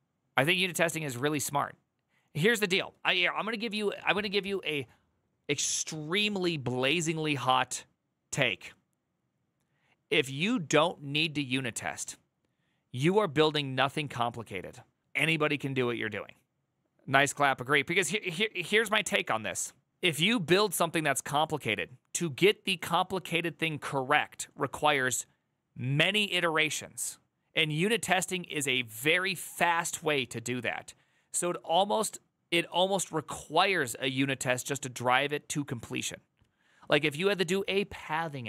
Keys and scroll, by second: 0.9 alt+[.